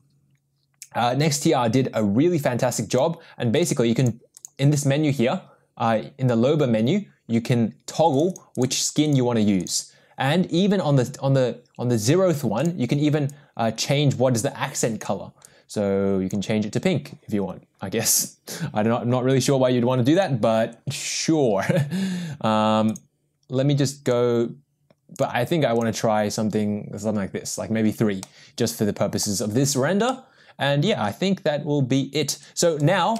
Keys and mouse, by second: 3.1 click, 3.7 click, 8.3 click, 8.6 click, 9.0 click, 12.6 click, 20.1 click, 24.2 click, 25.3 click, 28.2-29.2 middle drag, 30.1 middle click.